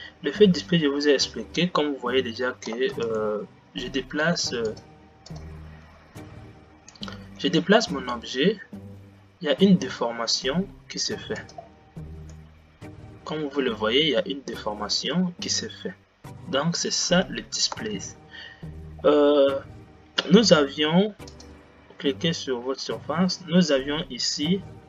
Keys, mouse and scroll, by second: 2.9 space, 3.6 g, 6.4 click, 7.7 g, 12.5-18.4 middle drag, 18.4 space, 22.5 click, 24.7-24.8 scroll down 10.